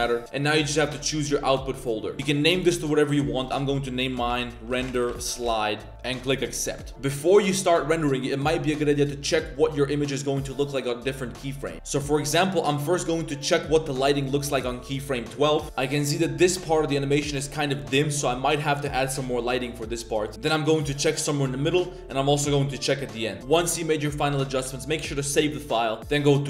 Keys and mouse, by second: 8.6-12.5 drag, 14.4 click, 20.3 click, 21.7-22.9 drag, 23.4 click.